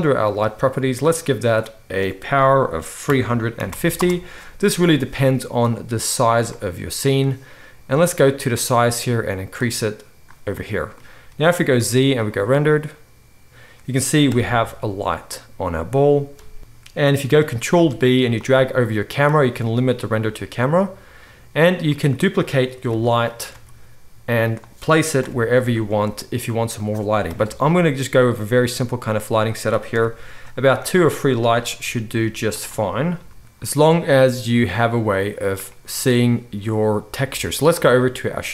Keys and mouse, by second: 0.3 click, 0.4-1.0 middle drag, 1.0 click, 1.2 middle click, 1.4-21.9 drag, 11.8 z, 14.3 KP_0, 16.6 ctrl+b, 17.7 ctrl+b, 21.9 middle click, 22.8 shift+d, 23.5 r, 24.6-25.4 middle drag, 25.2 KP_7, 25.8 middle click, 25.8 r, 27.2-28.6 middle drag, 27.2 KP_0, 29.9 KP_7, 30.8 shift+d, 31.7 r, 33.1 g, 33.3 middle click, 33.4 KP_0, 35.0-38.5 middle drag.